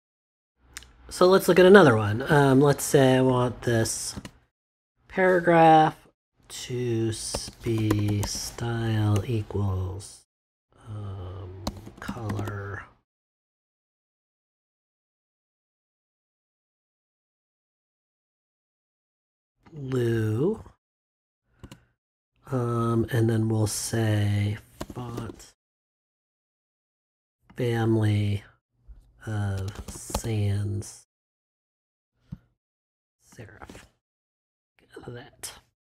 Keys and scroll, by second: 7.1-9.1 typing, 11.4-12.7 typing, 21.1 -, 21.6 space, 24.5-25.6 typing, 29.3-30.6 typing.